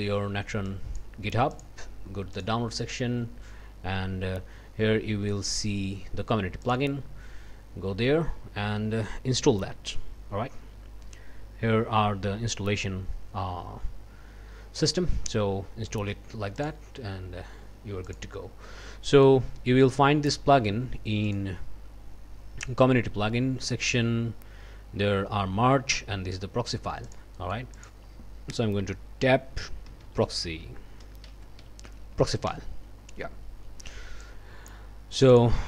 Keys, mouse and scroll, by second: 0.7 click, 1.5 click, 2.3 click, 6.6 click, 9.7-10.2 scroll down 2, 10.7-11.8 scroll down 4, 15.0 scroll down 2, 16.6 click, 18.1 click, 19.1 click, 21.2 click, 27.1 click, 28.0 click, 28.8 Tab, 29.6-31.6 typing, 32.2 Down, 32.5 Return, 34.2 click, 35.1 click.